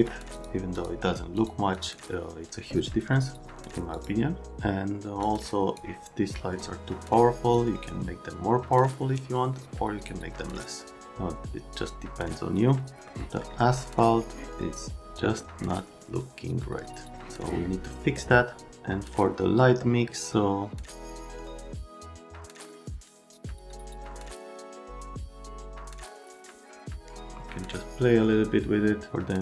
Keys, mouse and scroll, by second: 0.3 click, 0.7 click, 1.3 click, 1.7 click, 3.9 click, 5.2 click, 7.5 click, 13.1 middle click, 13.8 Up, 21.0 click, 21.2 click, 21.5 click, 22.5 click, 24.1 click, 24.7 click, 25.3 click, 26.8 click, 27.1 click.